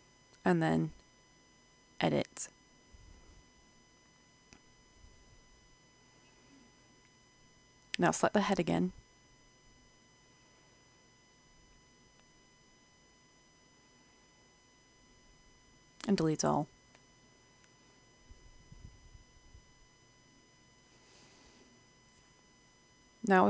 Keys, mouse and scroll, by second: 0.1-1.2 scroll down 1, 1.2-2.2 scroll up 1, 2.2-4.9 scroll up 1, 4.9 middle click, 6.0 a, 6.7 c, 7.2-8.0 scroll up 1, 8.0 click, 8.3 right click, 8.9 right click, 9.6-10.4 scroll down 1, 10.4 middle click, 11.5 click, 11.9 scroll down 1, 12.7-14.5 drag, 14.5 right click, 15.1 Delete, 15.5 i, 17.2 Tab, 18.0-19.9 middle drag, 21.9-23.2 scroll up 1, 23.2 Tab.